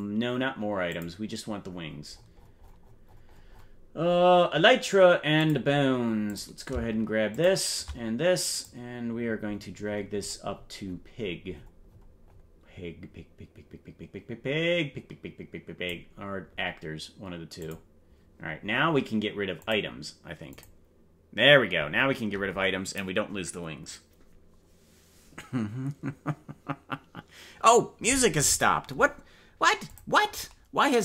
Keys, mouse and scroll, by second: 0.9 click, 1.6-3.8 scroll down 49, 4.2 scroll up 1, 5.3 click, 6.2 click, 7.3 shift+click, 8.6-16.1 drag, 9.2-13.0 scroll up 64, 17.6 click, 19.6 click, 20.7 click.